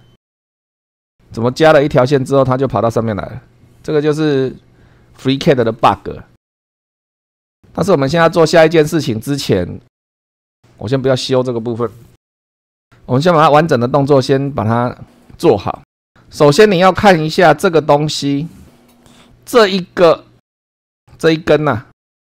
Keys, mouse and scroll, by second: 15.8 click, 16.4-16.8 scroll up 2, 21.0 click.